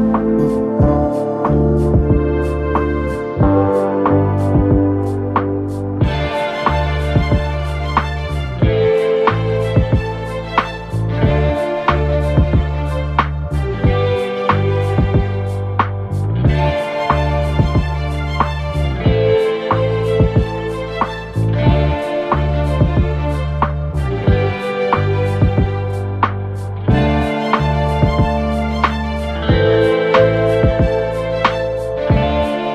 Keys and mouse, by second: 3.4 alt+click, 4.4 alt+click, 5.1 shift+i, 6.4 middle click, 6.8 click, 8.0 click, 9.0 click, 9.6 shift+click, 14.4 click, 16.0 shift+i, 18.6 4, 19.3 shift+i, 20.0 3, 20.9 middle click, 23.7-25.4 drag, 25.8 alt+click, 27.1 shift+i, 29.1 alt+middle click, 29.9 click, 30.5 3, 31.4 alt+click, 32.1 click.